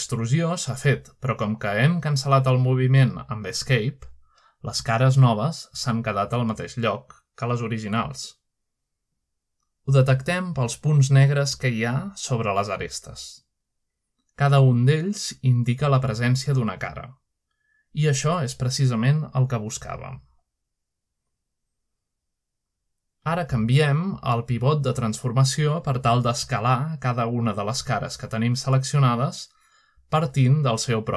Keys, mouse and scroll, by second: 0.5-2.1 middle drag, 2.5-3.5 typing, 4.3 click, 4.9 typing, 5.8 click, 6.7-7.6 scroll up 1, 10.1 middle click, 10.2-11.7 scroll up 1, 11.1 shift+middle click, 12.7-14.4 middle drag, 12.7 typing, 14.8 middle click, 16.7 middle click, 17.6 shift+middle click, 18.3-20.3 shift+middle drag, 20.7 shift+middle click, 21.3 shift+middle click, 21.7 middle click, 21.9 typing, 23.9-24.5 scroll down 1, 24.3 shift+middle click, 24.9 middle click, 25.6 middle click, 27.7 shift+middle click, 28.7-31.1 middle drag.